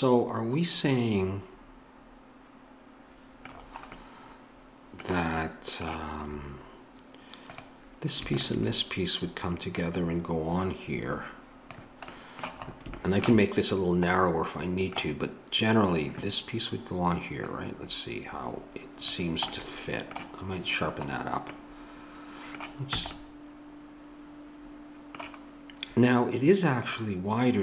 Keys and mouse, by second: 9.8-11.7 drag, 17.4-23.0 drag, 23.0-24.9 middle drag, 23.0 a.